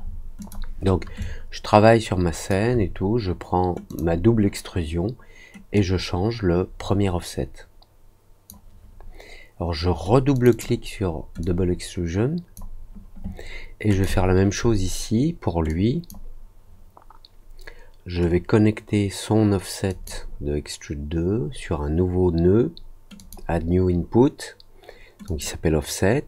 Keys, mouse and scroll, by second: 0.3 click, 1.1-2.4 alt+drag, 3.8 click, 5.7-8.4 drag, 10.3 click, 10.4 click, 11.3-12.5 drag, 13.8 click, 15.6 click, 19.8 click, 23.1 click, 25.2 click.